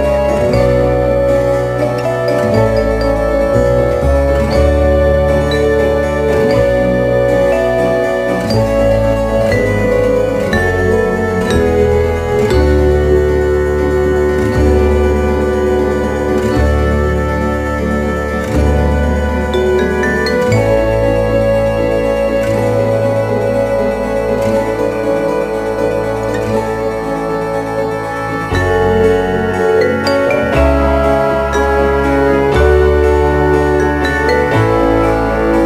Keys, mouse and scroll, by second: 2.4 click, 3.1 e, 6.3 click, 10.2 right click, 11.5 e, 14.7 click, 15.4 e, 17.1 click, 17.6 e, 19.8 click, 20.2 e, 22.9 click, 24.4 right click, 25.3 e, 28.2 click, 30.1 e, 32.8 click, 33.8 e.